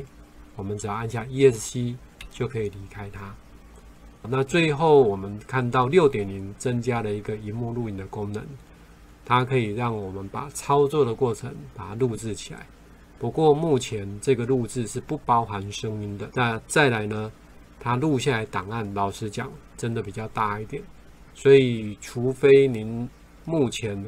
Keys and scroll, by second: 5.0 ctrl+5.